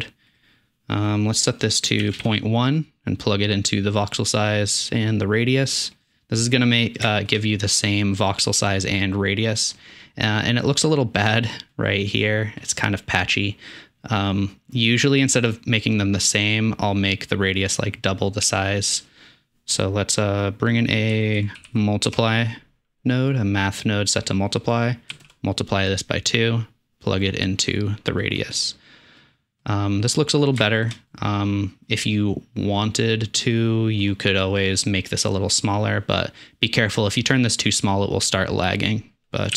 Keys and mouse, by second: 0.4 typing, 6.6-7.0 middle drag, 7.3-8.5 shift+middle drag, 9.6-10.4 middle drag, 11.4-11.8 drag, 11.8-13.0 middle drag, 17.1-18.1 drag, 19.0-23.4 drag, 23.4 typing, 33.0-33.3 middle drag, 33.4 middle click.